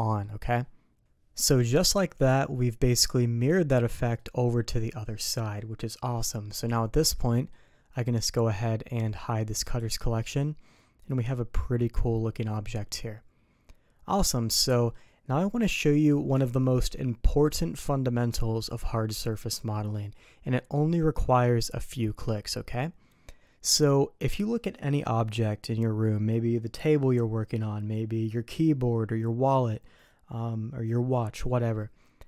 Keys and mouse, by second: 0.0 middle click, 1.5 middle click, 2.8 middle click, 3.7-4.1 middle drag, 6.9-7.5 middle drag, 9.6 click, 10.3-14.9 middle drag.